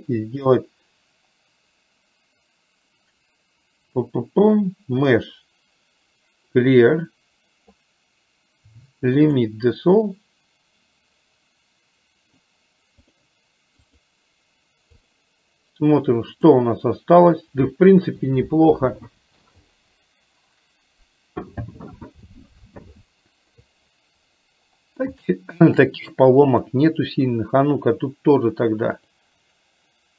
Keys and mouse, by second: 5.2-9.5 drag, 13.2-14.2 drag, 15.2 click, 25.3 shift+middle click, 29.2-30.1 drag.